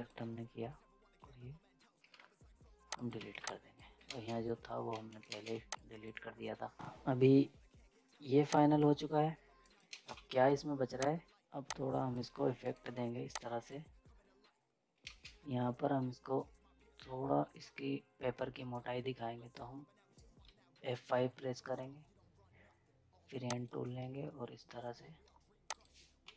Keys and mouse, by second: 2.9 click, 3.2 z, 3.5 click, 4.0 ctrl+space, 4.9 z, 5.1 right click, 5.3 ctrl+space, 5.5 z, 5.7 click, 6.8 z, 9.6 right click, 9.9 ctrl+space, 10.2 z, 11.0 click, 11.2 right click, 11.6 click, 12.6 right click, 13.3-15.1 drag, 15.1 ctrl+space, 20.9 F5, 23.4 click, 26.2 z.